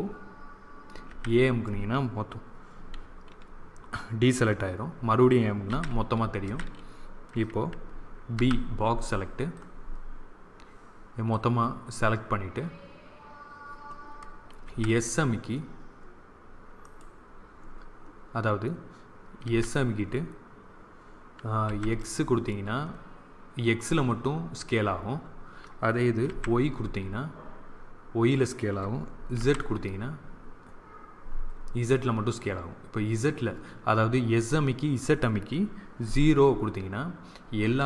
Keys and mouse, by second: 1.0 a, 5.6 a, 6.3 a, 8.2 b, 14.6 s, 19.4 s.